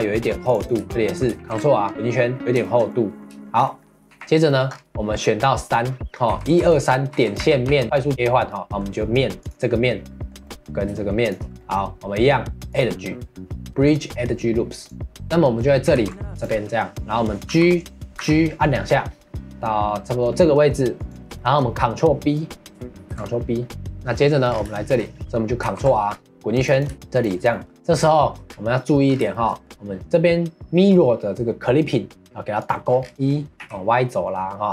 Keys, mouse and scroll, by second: 0.9 middle click, 1.3 ctrl+r, 2.6-4.1 shift+middle drag, 4.1 3, 4.5 middle click, 4.7-5.0 scroll up 1, 6.3 2, 7.4 2, 8.5 middle click, 9.4 click, 9.8-11.2 middle drag, 11.2 shift+click, 11.6-12.7 middle drag, 12.7-15.2 drag, 15.2 middle click, 15.9 ctrl+r, 21.3-23.0 shift+middle drag, 23.0 ctrl+b, 23.9 middle click, 24.5 scroll down 1, 24.7 shift+middle click, 25.6 ctrl+r, 26.9 3, 27.1 click, 27.5 middle click, 28.4-28.7 scroll down 1, 28.7 middle click, 29.1 scroll up 1, 29.3-32.6 shift+middle drag, 32.6 click, 33.0 scroll down 2, 33.1 e.